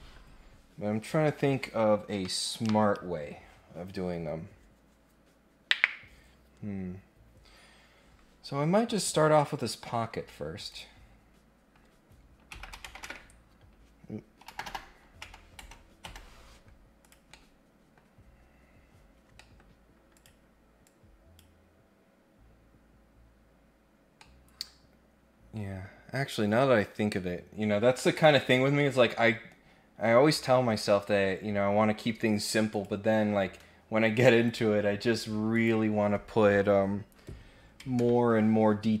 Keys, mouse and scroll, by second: 9.6 click, 10.7 click, 17.0 click, 17.3 middle click, 18.3-18.8 scroll up 2, 19.3 middle click, 20.1 click, 20.8 click, 22.7-23.6 scroll down 2, 23.9 scroll up 1, 24.2-27.2 middle drag, 27.5-28.0 scroll down 1, 28.1 click, 28.7 middle click, 32.7 click, 34.4 click, 35.5 click.